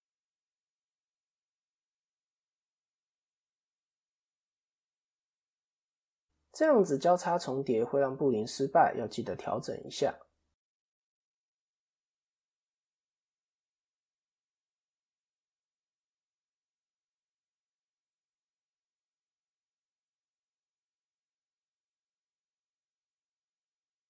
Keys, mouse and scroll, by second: 2.9 KP_7, 3.9 shift+middle click, 5.1-6.1 scroll up 3, 5.3 middle click, 7.6 click, 10.0 middle click, 10.7 KP_7, 11.6 Tab, 12.0-12.5 scroll down 2, 12.5 middle click, 13.6 ctrl+KP_3, 14.9 KP_3, 15.8 KP_1, 18.1 click, 19.0 shift+middle click, 19.5 click, 20.9 middle click, 21.6 shift+click, 22.4 click, 23.9 click.